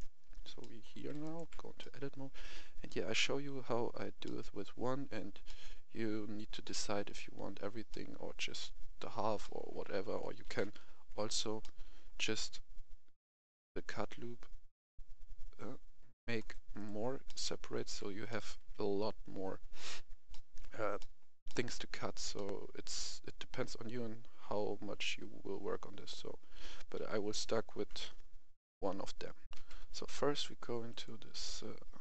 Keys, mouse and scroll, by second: 0.1 scroll up 1, 0.5 shift+middle click, 1.2 right click, 1.4 Tab, 1.7-10.1 middle drag, 10.4 ctrl+r, 11.6 middle click, 15.4-16.3 scroll up 1, 16.3 click, 16.7 right click, 17.2 middle click, 17.8 Tab, 18.2 middle click, 18.5 Tab, 18.9-19.5 scroll up 1, 20.2-26.4 middle drag, 26.9 ctrl+z, 27.3 ctrl+z, 29.4 click, 29.5 F10, 30.9 click.